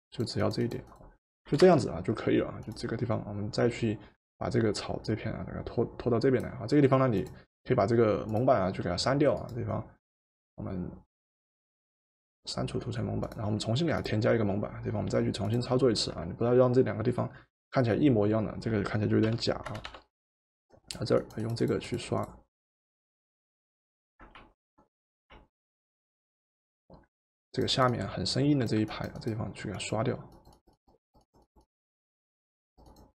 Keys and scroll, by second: 1.5 v, 19.3 b, 19.9 b, 24.4 ctrl+z, 25.3 ctrl+z.